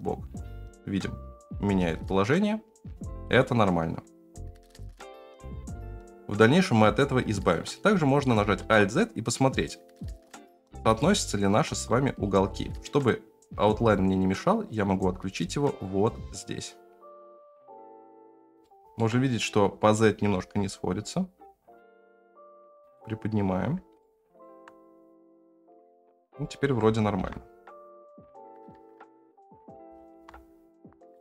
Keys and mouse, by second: 5.4 shift+middle drag, 8.0 shift+middle drag, 8.6 alt+z, 10.5 s, 11.7 s, 14.8-17.4 drag, 17.4 s, 17.8 shift+middle click, 17.9 g, 18.0 g, 18.3 g, 18.6-19.0 shift+middle drag, 20.2 s, 24.0-24.4 shift+middle drag, 26.4 shift+middle drag, 26.8 s, 29.8 g.